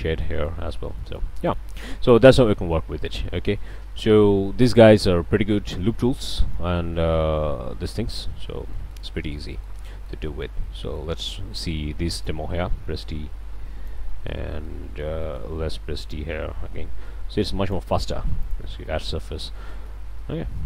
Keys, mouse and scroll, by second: 0.2 click, 0.7-1.0 scroll up 2, 1.0-1.4 shift+middle drag, 1.4 shift+middle click, 1.7 shift+scroll down 1, 5.1-5.4 scroll up 1, 6.3-6.9 shift+middle drag, 6.9 ctrl+shift+z, 8.7 ctrl+shift+click, 9.0 ctrl+alt+a, 10.1-10.6 shift+drag, 10.9 shift+drag, 11.5 d, 12.3-14.1 drag, 14.2 drag, 14.6-15.2 drag, 15.6 d, 18.1 q, 19.4 scroll up 1.